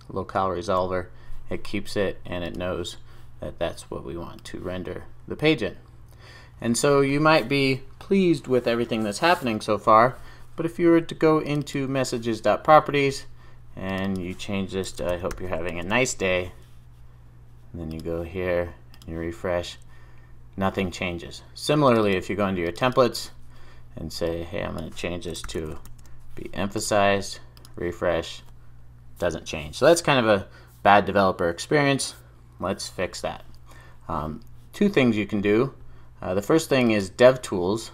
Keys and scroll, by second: 15.7 super+s, 25.9 super+s.